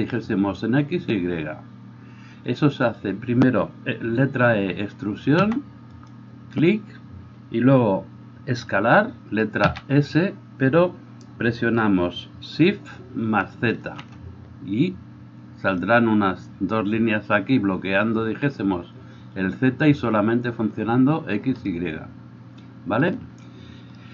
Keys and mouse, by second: 5.4 e, 9.6 s.